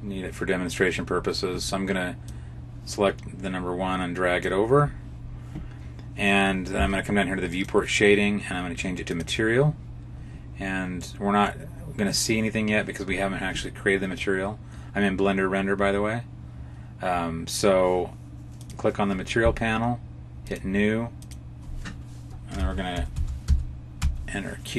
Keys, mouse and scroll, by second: 7.4 click, 11.1 middle click, 18.5 click, 20.4 click, 21.1 click.